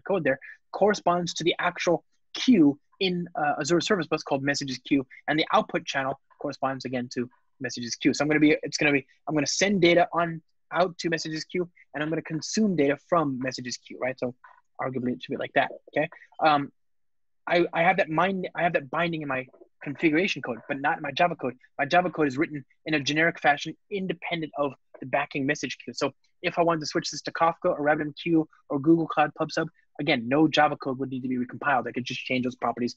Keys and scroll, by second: 14.2 alt+shift+Down, 21.4 alt+super+l.